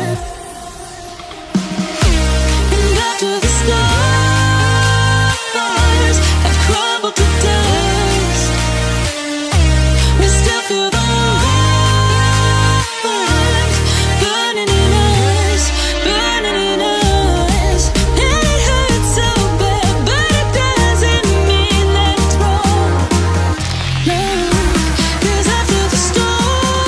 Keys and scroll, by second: 21.8 ctrl+j, 26.7 ctrl+t.